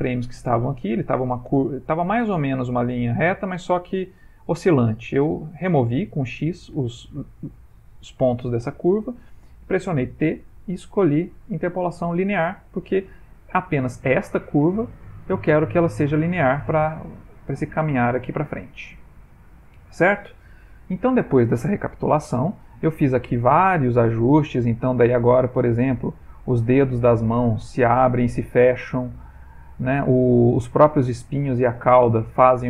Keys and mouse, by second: 7.4 click, 8.3 click, 10.3 click, 10.3 t, 13.5 click, 21.1 ctrl+Tab, 24.2 click, 25.8 middle click, 27.2 middle click, 27.7 click, 30.1 middle click, 31.6 middle click.